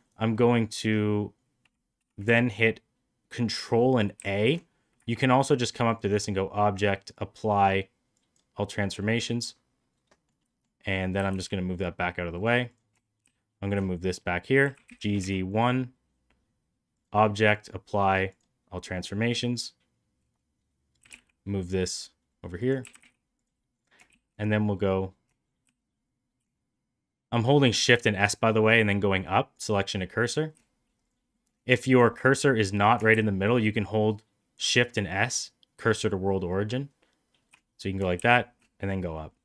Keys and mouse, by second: 0.0-5.0 right drag, 4.1 ctrl+a, 6.6 a, 8.9-10.1 middle drag, 10.3 middle drag, 11.1 g, 13.1 shift+s, 14.5 g, 20.9 g, 22.7 g, 23.6 click, 24.0 shift+s, 25.5 shift+s, 27.8 shift+s, 30.9 click, 31.2 middle click, 31.7 middle click, 33.0 shift+s, 38.1 shift+s, 39.2 middle click.